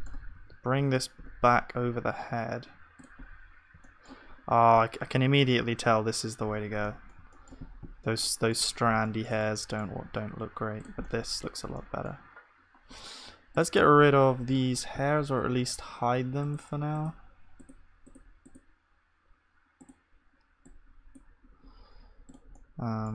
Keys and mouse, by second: 0.0 b.